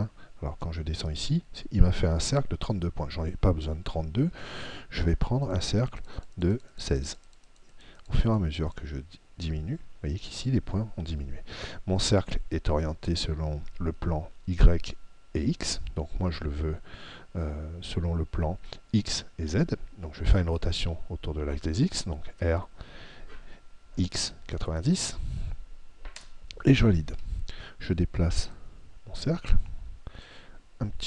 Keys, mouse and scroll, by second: 5.5 click, 22.3 r, 24.3 x, 28.6 click.